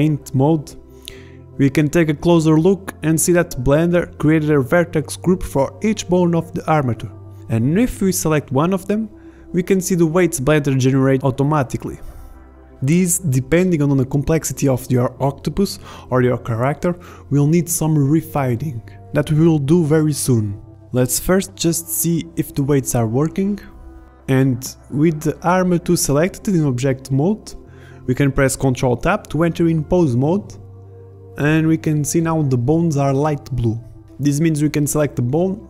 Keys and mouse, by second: 3.0-3.5 middle drag, 4.2 middle click, 4.7 middle drag, 5.1 middle click, 6.2 Up, 6.5 Up, 6.7 Up, 6.9 Up, 7.5 Down, 7.9 Up, 8.4 Up, 8.7 Up, 8.9 Up, 9.0 Up, 9.2 Up, 9.5 Up, 9.7 Up, 9.8 Up, 10.0 Up, 10.1 Up, 10.4 Up, 10.5-11.0 Up, 11.3 Up, 11.4-11.8 Up, 12.6 Up, 12.7-13.9 Up, 14.0-15.8 Down, 18.1 ctrl+Tab, 18.9 ctrl+Tab, 19.4 ctrl+Tab, 21.1 ctrl+Tab, 22.4 g, 24.0 ctrl+Tab, 24.5 ctrl+Tab, 26.2 g, 28.9 r, 29.4 click, 31.5 r, 33.7 middle drag, 34.0 r.